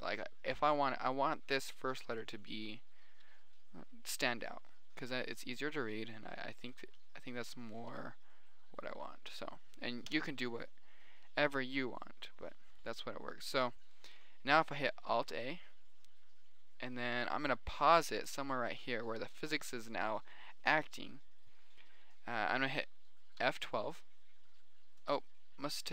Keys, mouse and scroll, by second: 0.8 middle click, 1.4-2.1 middle drag, 2.6-5.1 middle drag, 5.6 middle click, 6.2 middle click, 7.1 KP_7, 7.5 KP_3, 8.0 middle click, 8.3 KP_1, 9.2 middle click, 10.4 middle click, 10.5 KP_0, 15.6 alt+a, 18.7 drag.